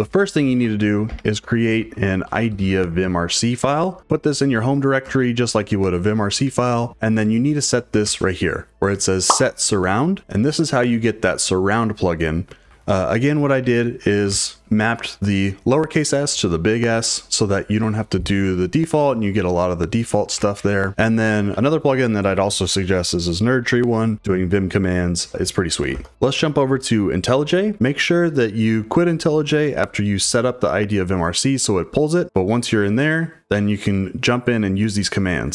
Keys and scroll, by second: 0.2-4.4 typing, 5.0 Return, 7.5 j, 8.0 shift+v, 12.7 Escape, 12.9-14.3 typing, 13.2 Escape, 13.2 Escape, 13.6 Escape, 20.3 Escape, 20.5 Escape, 20.7-23.6 typing, 25.9 super+Tab, 26.1 typing.